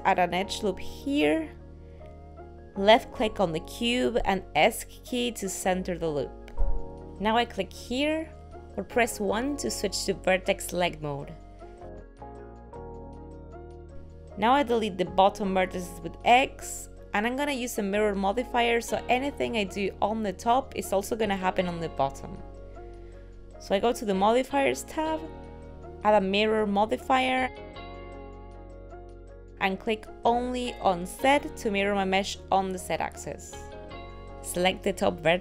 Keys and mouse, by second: 5.3 middle click, 8.2 click, 12.3 click, 16.1 middle click, 16.6 x, 18.6 shift+middle click, 19.3 middle click, 22.0 middle click, 24.9 click, 26.4 click, 30.9 click, 31.6 click, 34.4 middle click.